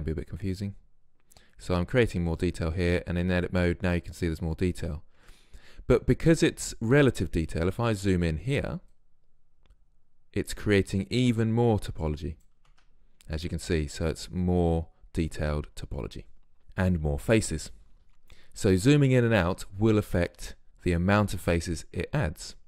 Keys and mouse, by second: 2.9 Tab, 5.3 Tab, 9.0-12.8 middle drag, 12.8 Tab.